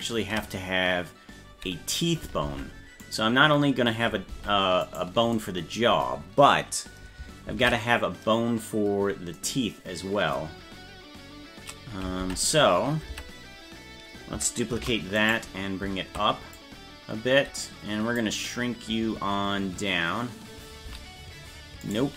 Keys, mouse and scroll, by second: 0.0 ctrl+z, 2.5 ctrl+Tab, 3.1 right click, 4.4 ctrl+Tab, 4.9 right click, 7.5 shift+d, 10.6-11.0 scroll down 5, 12.2 ctrl+Tab, 13.1 Tab, 14.8 shift+d, 16.6 click, 20.8 s.